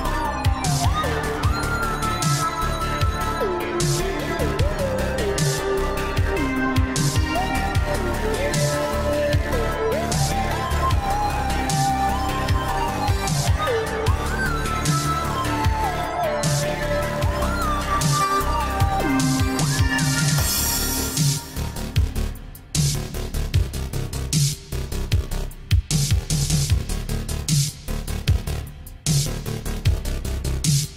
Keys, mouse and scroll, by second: 0.3 BackSpace, 4.3 click, 5.5 right click, 7.2-7.8 typing, 7.6 click, 9.0 click, 10.9 right click, 11.5 click, 14.0 BackSpace, 18.4 Return, 20.1 click, 28.0 BackSpace, 30.5 space.